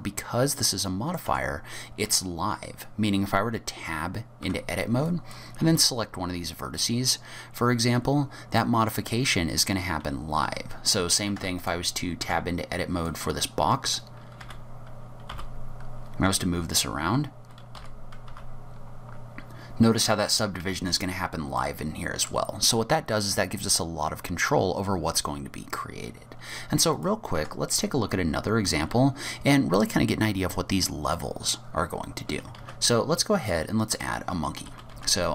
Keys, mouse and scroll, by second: 0.6 middle click, 1.3 Tab, 4.5 1, 5.1 click, 5.7 g, 11.0-11.4 scroll up 2, 11.4 Tab, 11.6 click, 12.0 scroll up 2, 12.2 Tab, 13.1 click, 14.4 r, 21.1-21.7 scroll down 7, 21.6 middle click, 22.6-24.6 scroll up 1, 26.1 scroll down 4, 26.4-27.0 scroll up 3, 27.0 click, 27.4 Tab, 28.4-29.3 scroll down 1, 29.3 scroll down 1, 31.9 scroll down 3, 32.2-32.6 scroll up 2, 32.6 shift+a, 34.7 g.